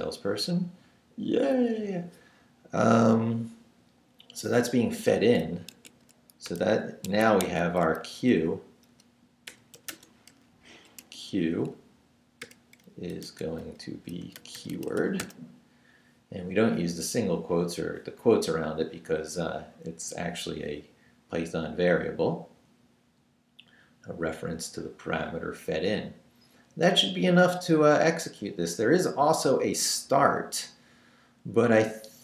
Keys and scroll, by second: 5.0 Down, 5.6 shift+Down, 5.7 shift+a, 6.5 shift+BackSpace, 7.0 Escape, 7.4 shift+a, 8.0 shift+Left, 8.7 Left, 8.9-11.0 typing, 12.4-15.7 typing.